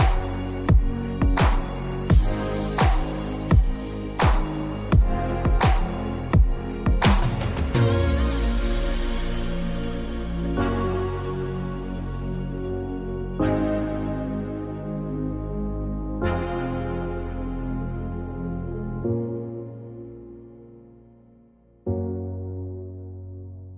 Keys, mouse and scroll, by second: 0.3 click, 0.4 click, 2.8 click, 7.0 click, 8.3 alt+scroll up 1, 10.3 click, 14.5 space, 15.4-21.4 shift+drag, 21.4 Delete, 22.9 alt+scroll up 1.